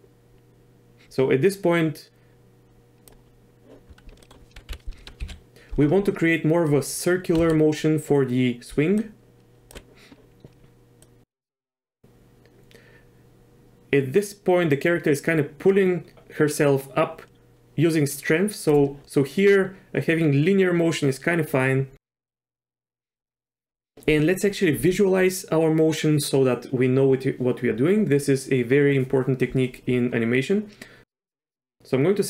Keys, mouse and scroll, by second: 4.2 middle click, 4.7 KP_1, 5.2 KP_3, 7.4 z, 8.7 d, 9.0 click, 9.7 d, 9.8 d, 11.0-18.7 drag, 22.3-23.1 drag, 31.4 drag.